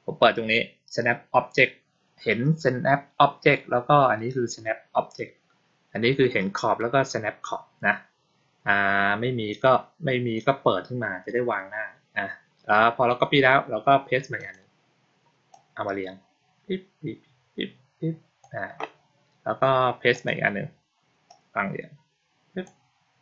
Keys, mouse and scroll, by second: 14.2 click, 15.4-18.3 drag, 20.0 click, 21.1-22.5 drag.